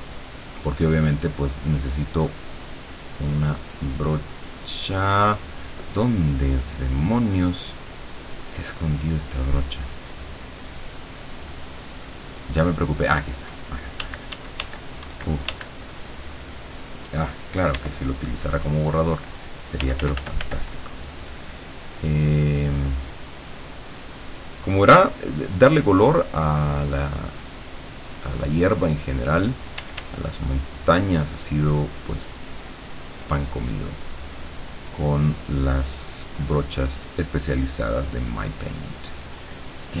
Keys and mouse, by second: 0.0 click, 0.7 click, 1.2 click, 3.0-5.4 drag, 6.0 click, 8.8 click, 9.4 click, 10.4 click, 10.8 click, 11.5 click, 13.0 click, 14.1 d, 15.8 click, 17.8 e, 18.2 click, 19.8 f, 20.6-29.9 drag, 29.8 d, 30.2-34.1 drag, 35.2-40.0 drag.